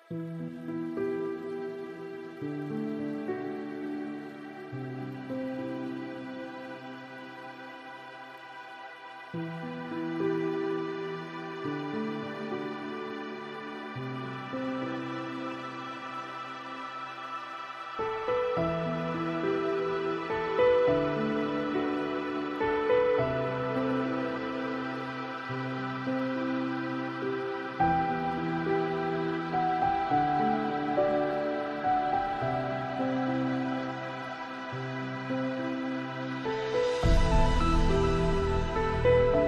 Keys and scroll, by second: 0.3 shift+F6, 19.9 ctrl+space.